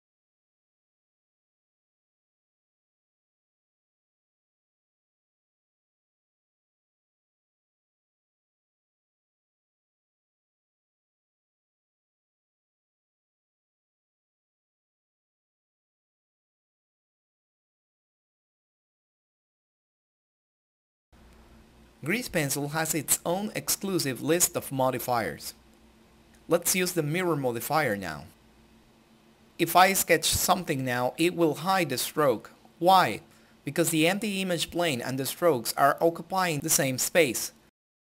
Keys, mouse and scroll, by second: 10.1 click, 15.5 right click, 16.7 click, 23.1 click, 27.5-32.1 drag, 32.1-35.3 drag, 37.2 click.